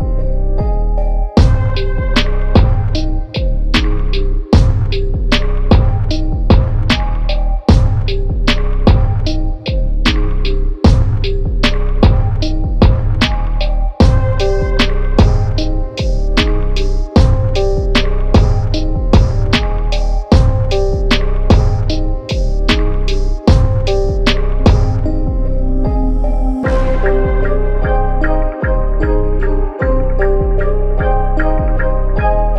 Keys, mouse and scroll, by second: 0.1-1.1 middle drag, 1.1 ctrl+z, 1.5 middle click, 2.3-3.3 drag, 3.9 click, 4.7 Tab, 5.2 Tab, 6.4 click, 6.8 click, 7.7 click, 8.6 g, 10.5 Tab, 11.1 click, 11.9-13.1 shift+middle drag, 13.1-14.5 drag, 14.5-15.0 scroll down 1, 15.0 click, 15.7 g, 18.4-18.8 scroll up 4, 18.8 shift+middle click, 19.2-19.7 scroll up 1, 19.7 Tab, 20.0 Tab, 20.1 click, 20.3 Tab, 21.1 click, 23.0 click, 24.3 g, 25.3 click, 25.8 g, 27.5 Tab, 27.8-28.9 middle drag, 28.9 click, 29.2-30.5 middle drag, 30.5 click, 30.8 click, 31.4 s.